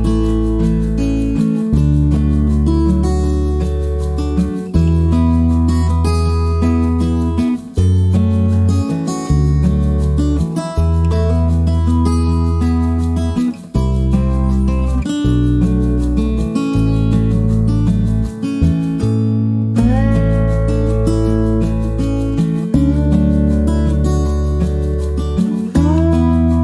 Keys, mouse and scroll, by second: 1.2 click, 2.3 click, 3.4 click, 4.8 click, 5.6 click, 7.6-8.9 drag, 11.2-13.0 drag, 13.3-16.4 drag, 18.1 shift+click, 19.6 click, 21.1 click, 22.4 click, 24.7 click.